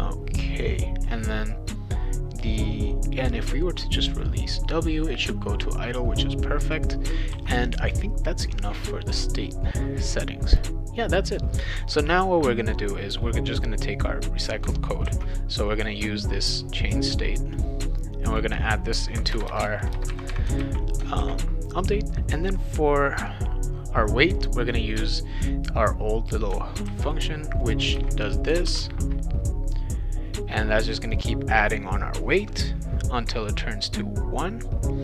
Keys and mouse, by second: 6.2 click, 7.3 ctrl+s, 13.5-14.5 drag, 15.0 ctrl+c, 18.3 click, 19.3 Return, 20.6 ctrl+v, 21.2 ctrl+s, 24.7-26.3 drag, 26.8 ctrl+c, 27.6 click, 28.0 ctrl+v, 28.7 ctrl+s.